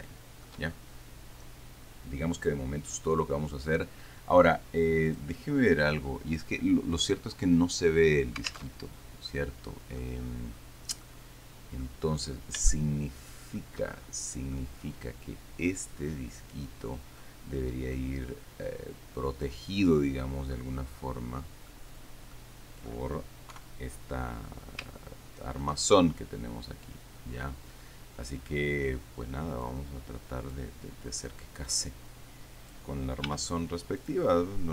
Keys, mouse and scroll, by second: 0.0 shift+middle click, 3.2-3.6 scroll up 2, 3.3 middle click, 5.4 click, 9.0 alt+Tab, 9.5 click, 9.8 middle click, 10.3 click, 10.4 middle click, 10.4-11.3 scroll down 3, 11.3 middle click, 12.3-13.0 scroll up 3, 13.0-14.0 shift+middle drag, 14.8-16.8 middle drag, 18.2-19.9 drag, 20.7 middle click, 21.3 click, 22.3-22.7 scroll down 2, 22.7 click, 23.8 3, 24.7-25.2 scroll up 2, 25.2-26.3 shift+middle drag, 29.9-31.0 drag, 32.0-33.3 drag, 33.5 s, 34.3 click.